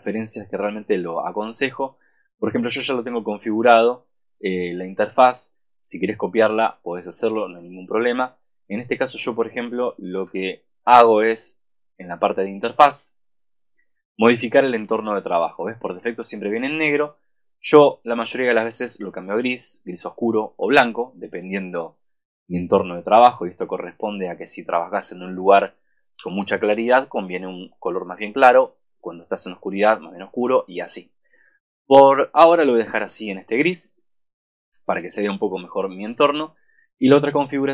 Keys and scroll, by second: 10.1 super+=, 26.3 super+-.